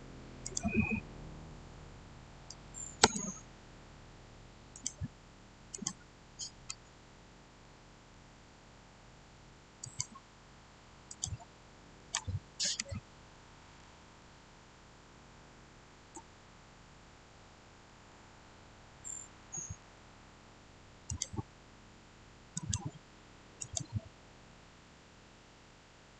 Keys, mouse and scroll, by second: 2.4 6, 2.9 Return, 4.6 click, 7.1-7.5 scroll down 1, 7.5-9.7 middle drag, 9.7 click, 14.1-18.0 shift+middle drag, 18.0 shift+scroll down 1, 21.0 click, 25.0-26.1 scroll up 1.